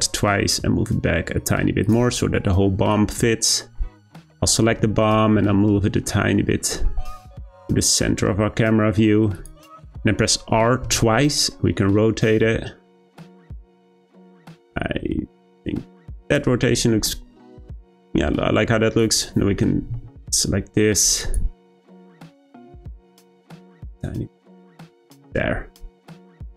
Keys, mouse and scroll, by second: 2.9 click, 5.4 g, 10.8 r, 17.9 click, 19.0 shift+click, 19.9 g, 22.2 r, 23.5 g, 24.8 click, 25.6-26.5 scroll down 1.